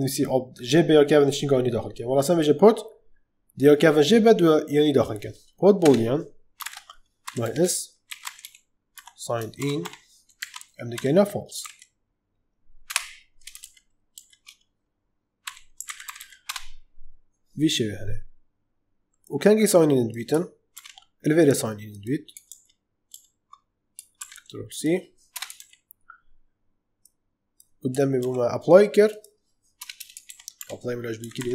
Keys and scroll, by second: 5.7 Return, 6.6-9.7 typing, 10.3 Right, 10.8-12.0 typing, 12.8 Return, 13.5 ctrl+z, 15.1-16.6 typing, 20.6 ctrl+x, 22.4 ctrl+z, 25.2 Return, 25.5 ctrl+v, 28.1 ctrl+x, 29.7 Return, 30.2 ctrl+v, 30.5 Up, 30.8-31.5 typing.